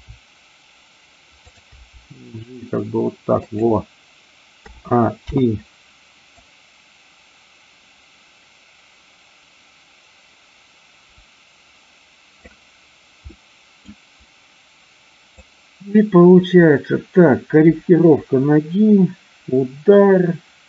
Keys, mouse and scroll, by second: 1.5 click, 1.8 g, 3.4 click, 4.5 a, 5.1 i, 6.4-12.5 drag, 13.4 middle click, 15.3-20.6 drag.